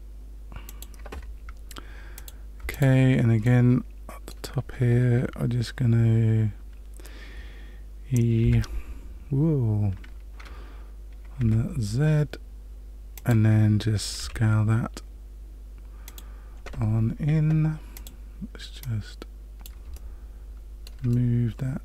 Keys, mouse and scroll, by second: 2.1 click, 2.7 alt+click, 3.4 middle click, 8.4 e, 14.1 s, 17.9 click, 18.8 click, 19.9 shift+middle click, 21.1 middle click.